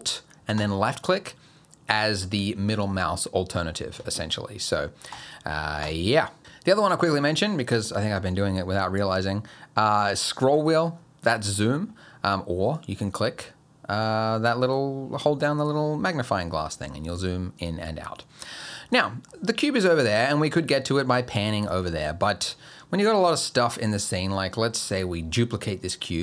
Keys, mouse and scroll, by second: 0.6 middle click, 5.8 click, 8.6-9.0 scroll up 1, 9.0 scroll down 1, 9.2 scroll up 1, 9.4 scroll down 1, 10.0-10.3 scroll up 1, 10.3-10.9 scroll down 3, 10.9 scroll up 4, 11.2 scroll down 3, 11.5 scroll up 1, 11.7 scroll down 1, 11.9-12.7 scroll up 1, 12.7 click, 18.1-18.4 scroll down 1, 18.4-18.9 scroll up 1, 18.9 middle click, 20.3 middle click, 20.7 shift+middle click, 21.4 middle click, 21.9 shift+middle click, 23.5-24.5 scroll down 5, 23.9 middle click, 24.5 middle click.